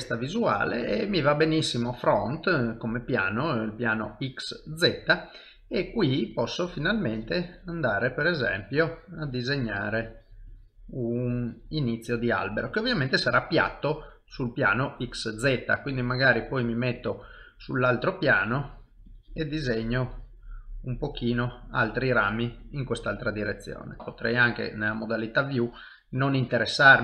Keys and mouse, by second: 0.0 shift+middle click, 0.5 ctrl+middle click, 1.1 shift+middle click, 2.8 middle click, 5.0 middle click, 6.2 click, 6.7 click, 8.2 click, 10.5 click, 12.3 middle click, 14.2 middle click, 15.6 click, 17.3 middle click, 18.3 click, 18.7 click, 21.4 middle click, 22.7 shift+middle click, 23.1 middle click, 24.0 click, 24.4 middle click, 25.4 click.